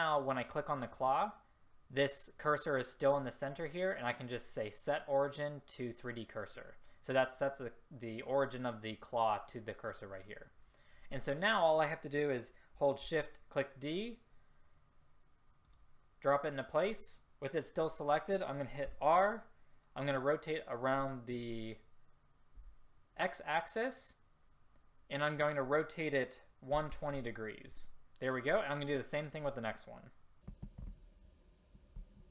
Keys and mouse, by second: 13.1 shift+d, 19.1 r, 30.5 r.